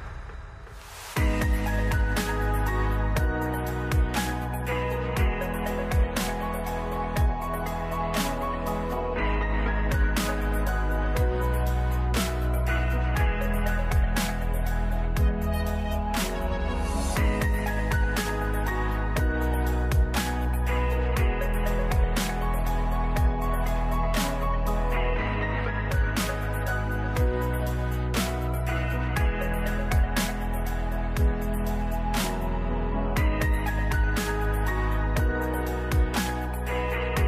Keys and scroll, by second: 3.7 ctrl+s, 14.3 space, 21.2 ctrl+s, 27.1 space.